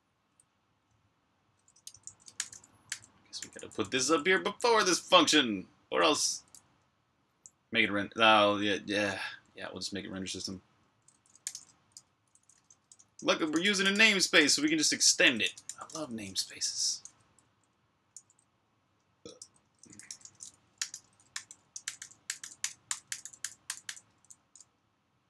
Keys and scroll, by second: 1.5-4.8 typing, 6.0-6.6 typing, 7.7-8.4 typing, 16.9-23.7 typing.